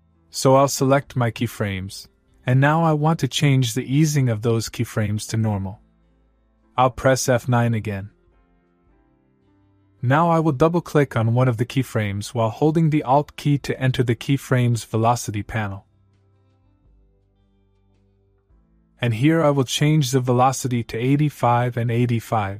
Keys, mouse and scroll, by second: 8.9 F9, 16.7 alt+Num_Lock, 17.1 alt+click, 19.8 click.